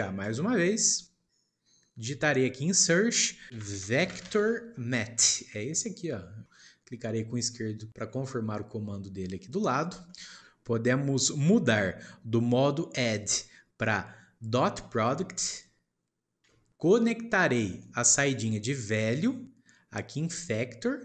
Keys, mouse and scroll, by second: 0.2 shift+a, 10.0-10.9 shift+middle drag, 13.0-16.0 drag, 16.8-18.0 shift+middle drag, 19.2 click.